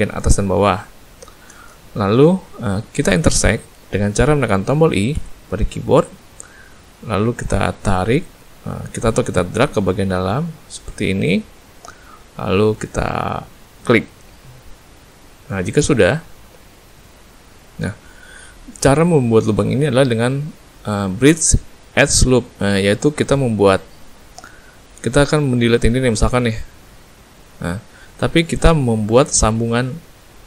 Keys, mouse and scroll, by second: 1.1 shift+middle click, 1.8 shift+middle click, 2.6 middle click, 15.7 middle click, 26.4 x, 28.1 middle click, 28.8 middle click.